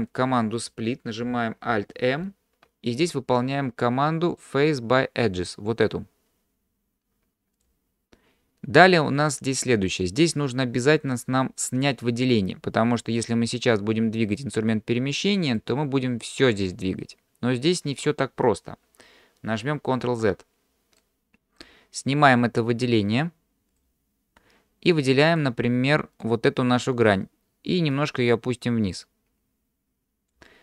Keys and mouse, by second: 2.2 alt+m, 14.5-15.6 drag, 20.1 ctrl+z, 21.0 middle click, 25.4 click, 26.2 click, 28.0-30.3 drag.